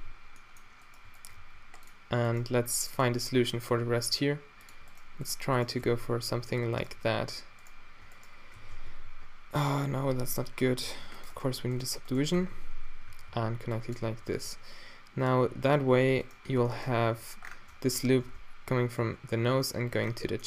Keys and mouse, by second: 0.0 f, 1.4 g, 2.4 g, 4.6 g, 4.6 e, 5.8 f, 7.0 q, 8.6-10.1 typing, 10.9 ctrl+r, 12.4-14.4 typing, 15.9-16.3 drag, 16.8 b, 17.2 q, 17.7 Tab, 18.3 Tab, 19.0 Tab.